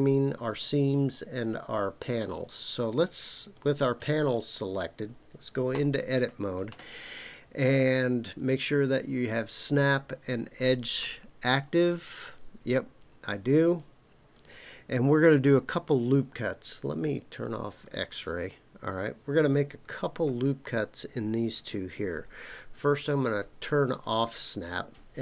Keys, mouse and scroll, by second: 2.9 click, 3.5 click, 4.2 click, 5.7 Tab, 11.8-13.0 drag, 17.8 click, 19.9-20.5 scroll up 2, 23.9 click.